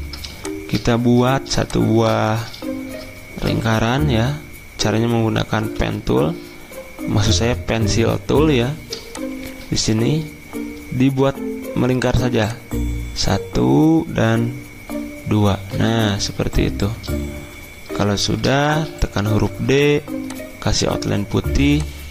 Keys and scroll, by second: 5.7 n, 18.2-19.3 typing.